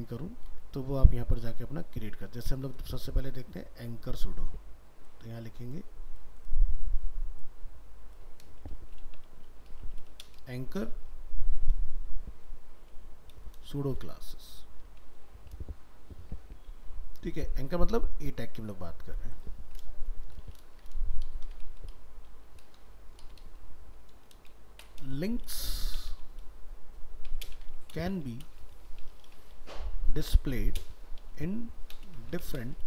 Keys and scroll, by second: 16.7 ctrl+s.